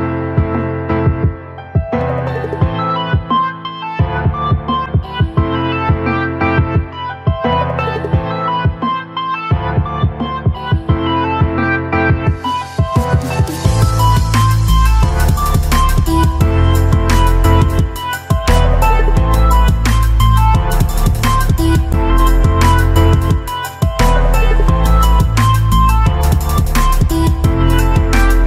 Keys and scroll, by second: 8.0 ctrl+alt+z, 20.3 ctrl+alt+z.